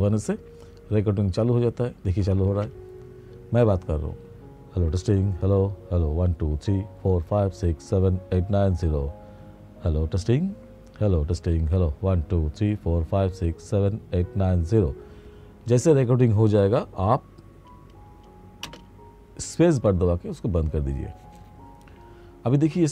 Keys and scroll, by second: 2.3 ctrl+space, 18.7 space.